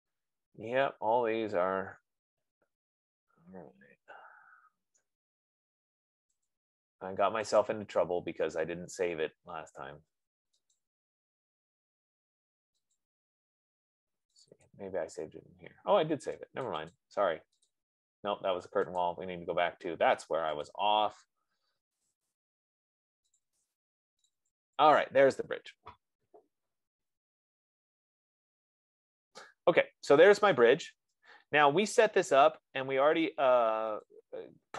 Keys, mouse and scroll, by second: 6.9 click, 8.1 click, 11.1 click, 13.4 click, 14.8 click, 15.0 click, 17.1 click, 17.3 click, 18.3 click, 19.4 click, 21.2 click, 22.9 click, 23.7 click, 23.9 click, 24.5 click, 24.9 click, 30.5 middle click, 30.7 middle click, 32.9 right click, 34.6 click.